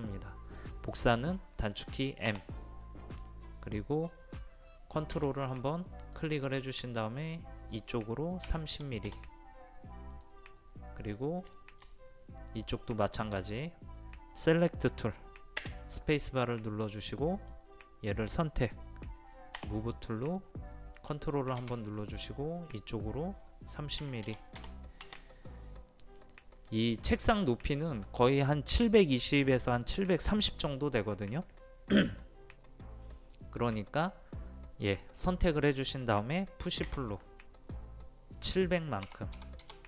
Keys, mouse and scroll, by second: 2.3 m, 6.0 click, 8.5 KP_3, 8.7 KP_0, 10.1 middle click, 10.3-10.9 scroll up 1, 11.0 middle click, 11.6 shift+middle click, 16.4 space, 17.4-18.4 drag, 19.6 m, 22.2 click, 24.0 KP_3, 24.3 KP_0, 26.2-27.4 middle drag, 27.4 click, 36.9 p, 37.6 click, 39.1 KP_7, 39.4 KP_0.